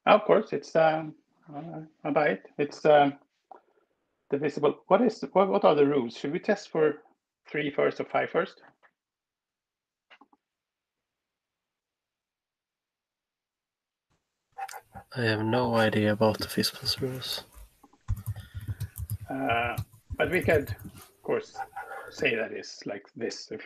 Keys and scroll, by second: 11.5 Down, 18.7 super+x, 21.0 super+v, 21.7 Return.